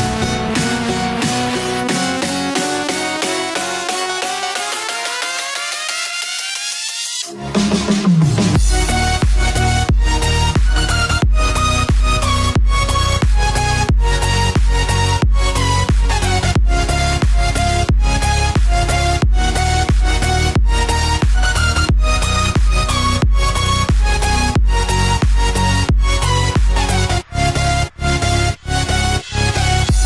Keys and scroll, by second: 0.0 ctrl+s, 2.5-3.5 typing, 3.7 Tab, 4.4 ctrl+s, 8.1 F5, 9.7-12.9 typing, 11.5 Down, 11.7 Return, 12.7 Left, 14.4 space, 17.7-18.8 typing, 19.2 Down, 19.7 Return, 19.9-22.1 typing, 23.3-26.3 typing, 24.5 Return, 27.5 ctrl+c.